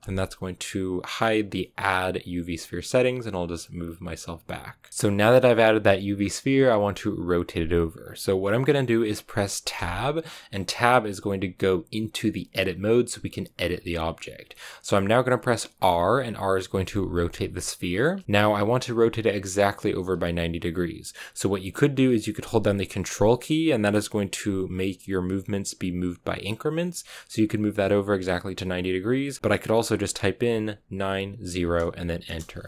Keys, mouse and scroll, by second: 4.9-9.7 shift+middle drag, 9.7 Tab, 15.7 r.